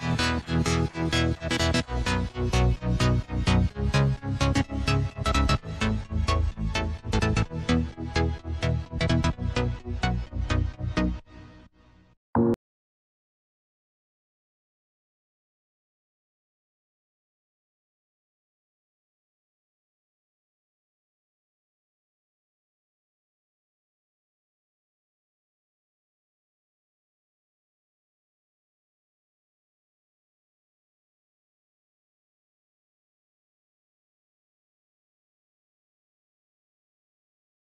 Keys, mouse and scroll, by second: 4.1-6.4 drag, 8.7 click, 9.2-10.4 drag, 10.5-11.4 scroll down 2, 11.4-13.1 drag, 13.1-14.8 scroll down 2, 14.8-16.1 drag, 18.0-18.7 drag, 18.7-20.3 scroll up 2, 20.3-22.8 drag, 22.8 scroll down 1, 24.3 click, 28.0 click, 29.5-30.0 scroll down 1, 31.0 click, 31.8-34.0 drag, 34.0-34.5 scroll down 1, 34.8 click, 35.9 click, 37.0-37.7 drag.